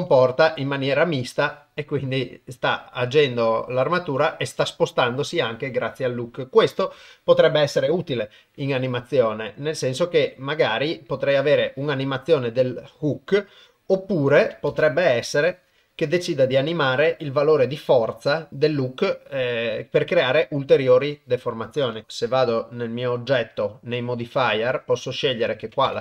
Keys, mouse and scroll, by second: 0.0 g, 8.5 g, 14.7 shift+space, 15.3 click, 21.2 click, 22.0 shift+Left, 25.5 click.